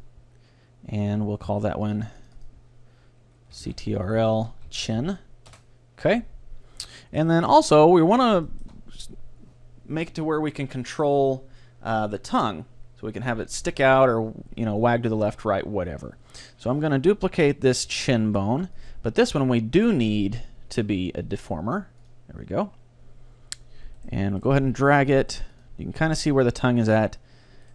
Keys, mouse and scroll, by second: 1.9-4.3 drag, 6.6-10.4 middle drag, 7.5 z, 17.9 shift+d, 18.9-20.8 drag, 20.4-21.1 scroll up 1, 21.1-22.4 middle drag, 21.3-23.8 drag, 23.0-24.8 middle drag, 24.0-26.0 right drag, 24.6 g, 25.7-27.2 drag, 26.8-27.7 middle drag.